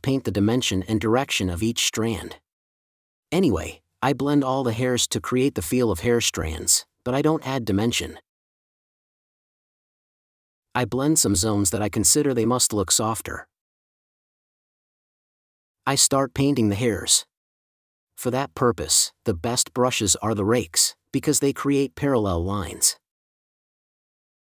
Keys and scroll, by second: 2.9 space, 5.1 space, 9.1 super+z, 10.3 5, 13.0 space, 14.3 super+s, 14.8 space, 24.1 space.